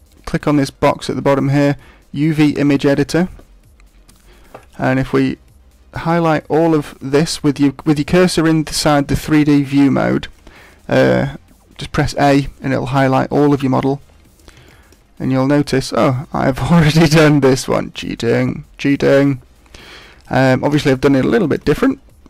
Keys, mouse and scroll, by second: 4.0-4.9 scroll up 2, 4.9 a, 5.8-6.4 scroll down 1, 6.4-6.8 scroll up 2.